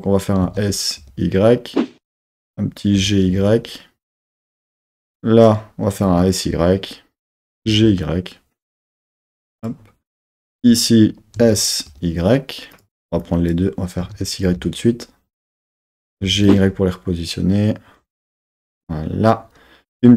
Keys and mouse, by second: 0.4 s, 1.0 y, 2.1 click, 3.0 g, 3.3 y, 4.9 click, 6.0 s, 6.6 y, 7.2 click, 7.6 g, 7.8 y, 8.7 click, 9.1 s, 9.6 click, 10.3 click, 11.4 s, 11.9 y, 12.7 click, 13.0 super+z, 13.3 click, 14.0 s, 14.5 y, 15.8 click, 16.2 g, 16.5 y, 18.7-20.0 drag, 20.0 r.